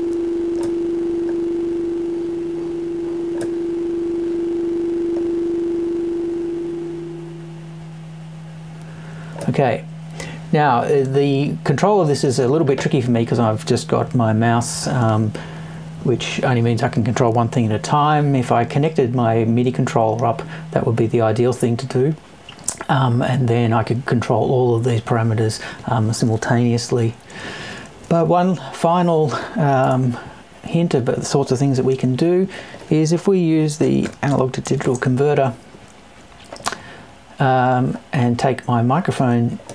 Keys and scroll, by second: 29.8 BackSpace.